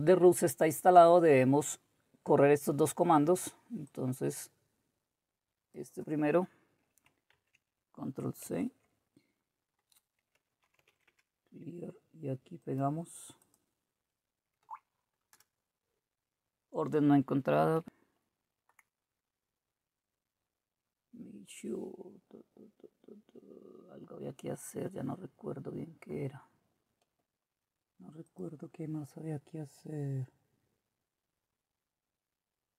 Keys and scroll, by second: 8.5 ctrl+c, 14.6 Right, 15.3 Return, 17.8 alt+Tab.